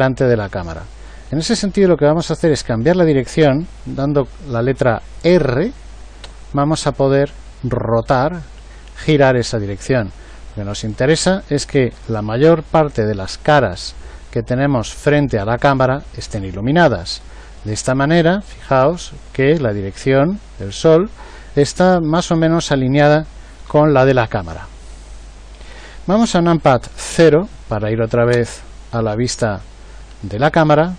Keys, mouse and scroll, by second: 6.2 r, 23.6 r, 28.2 KP_0.